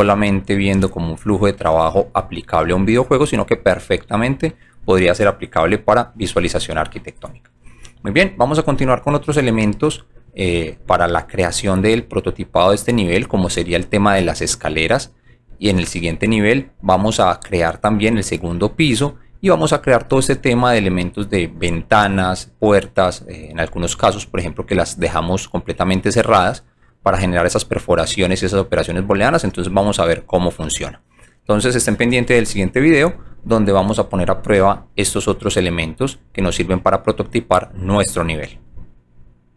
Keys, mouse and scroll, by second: 0.7 alt+click, 2.1 alt+click, 2.6 alt+click, 3.5 alt+middle click, 11.6-13.0 alt+drag, 14.4-15.4 alt+drag, 18.3 alt+middle click, 24.2 alt+click, 26.2 alt+click, 27.4-29.1 alt+drag.